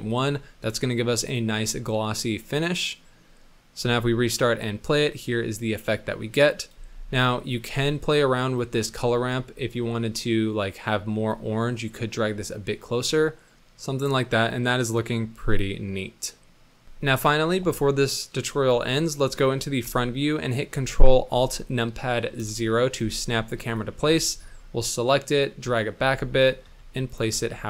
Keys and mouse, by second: 0.2-0.8 middle drag, 1.7-3.6 middle drag, 3.8 space, 4.7 middle drag, 6.7 space, 7.3 middle click, 8.7 click, 8.9 middle click, 9.7 middle click, 11.4-13.5 drag, 15.0-16.9 middle drag, 16.6 z, 16.9 space, 19.7 KP_1, 22.4 ctrl+alt+KP_0, 24.4 g, 25.9 g, 26.6 g, 27.3 g.